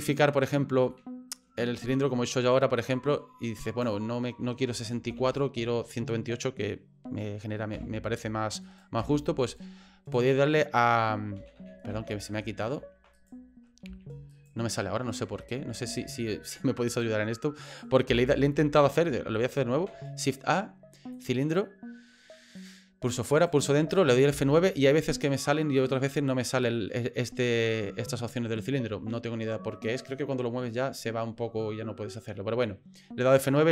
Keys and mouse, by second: 0.0 right click, 0.9 middle click, 3.4 right click, 5.1 ctrl+z, 7.7 F9, 8.6 right click, 9.0 F9, 9.4 right click, 10.2 right click, 11.4 ctrl+z, 11.6 ctrl+z, 11.9 ctrl+z, 12.3 ctrl+z, 12.7 ctrl+z, 13.2 right click, 13.9 F9, 14.3 right click, 15.4 ctrl+z, 15.7 ctrl+z, 16.0 ctrl+z, 16.9 right click, 17.7 right click, 18.1 Delete, 19.7 shift+a, 22.6 right click, 23.3 right click, 24.3 F9.